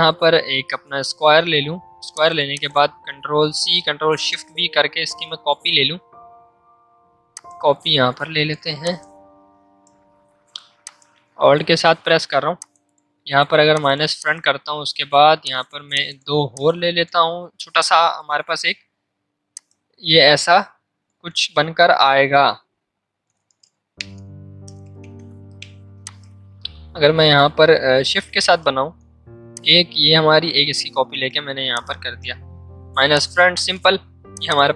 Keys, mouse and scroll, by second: 1.5 v, 4.0 ctrl+shift+v, 7.3-8.8 drag, 8.8-10.8 drag, 15.1 z, 16.6 click, 17.5 c, 19.5-21.1 shift+drag, 21.1 ctrl+z, 21.5 m, 22.4 ctrl+z, 23.1 ctrl+shift+z, 23.8 ctrl+z, 24.6 ctrl+shift+z, 26.0-28.8 drag, 28.8 v, 29.5-31.7 alt+drag, 34.3 alt+click.